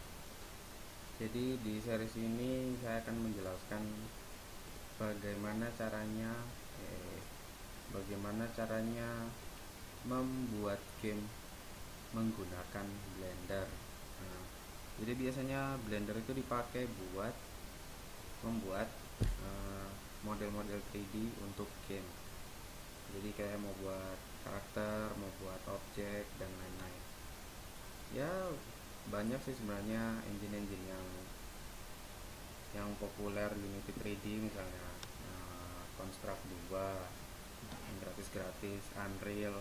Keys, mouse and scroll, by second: 2.0-7.3 right drag, 8.1-9.9 right drag.